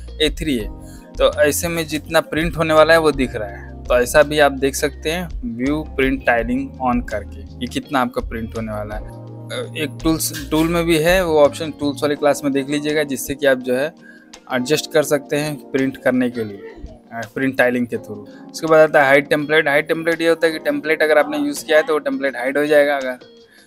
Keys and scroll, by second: 1.8 Escape, 4.1 space.